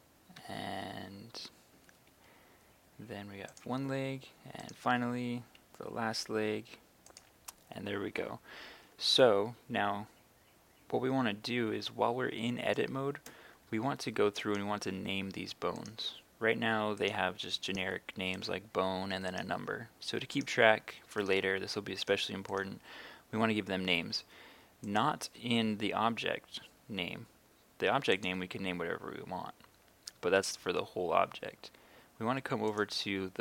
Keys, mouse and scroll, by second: 0.4 e, 1.8 z, 4.6 right click, 5.0 e, 5.4 z, 7.1 click, 14.4 right click, 22.6-23.6 right drag, 24.9-33.4 drag.